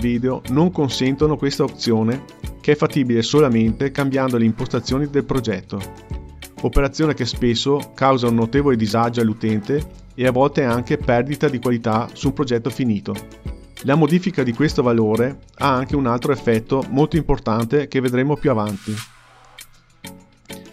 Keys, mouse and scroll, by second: 0.9-2.4 drag, 4.0-5.5 drag, 5.9 click, 7.6-8.4 scroll down 2, 8.4-9.2 scroll down 1, 12.9 click, 14.9 click, 17.9 space, 19.2 space, 20.1 click.